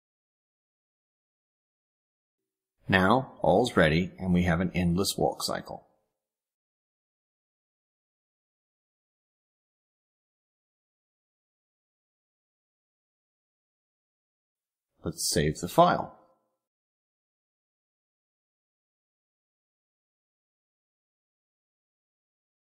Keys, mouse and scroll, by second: 0.9-1.5 scroll down 4, 2.7 click, 3.7 click, 4.5 click, 11.7 click, 13.0 click, 14.5 click, 15.1 click, 15.8 click, 16.6 click, 17.1 click, 17.7 click, 18.4 click, 18.8 click, 20.1 click.